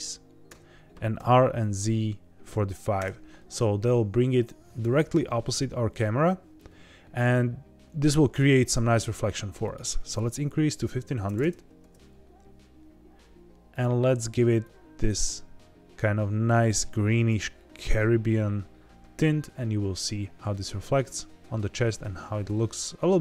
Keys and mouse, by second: 0.4 KP_Enter, 1.1 r, 1.8 z, 2.4 KP_4, 2.5 KP_5, 2.9 KP_Enter, 9.6-12.0 drag, 11.3 KP_0.